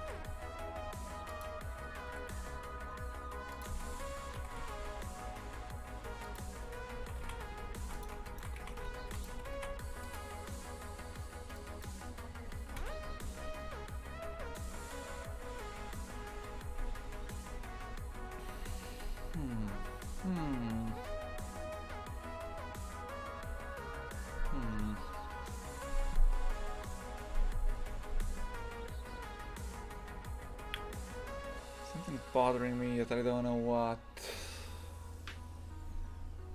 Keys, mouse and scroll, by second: 0.0 r, 2.1 r, 3.7 shift+d, 7.2 shift+f, 8.2 shift+right click, 8.6 shift+f, 9.3 g, 11.5-13.1 drag, 13.1 F12.